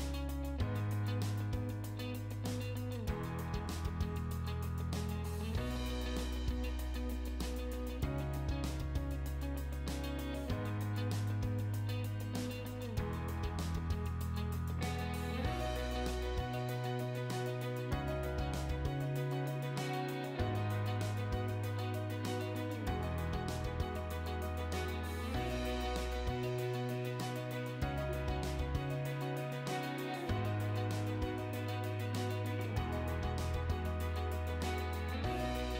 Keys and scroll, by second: 4.5 m, 4.6 space, 12.3 Escape, 14.0 Delete, 22.8 m, 23.0 i, 24.1 BackSpace, 24.6 space.